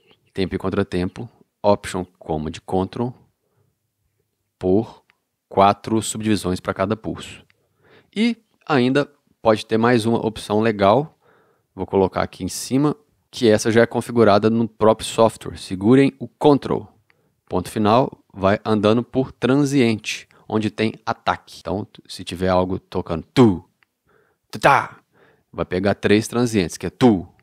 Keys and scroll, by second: 0.0 alt+super+,, 3.6 ctrl+alt+super+., 7.2 ctrl+alt+super+,, 8.0 ctrl+alt+super+., 13.2 ctrl+,.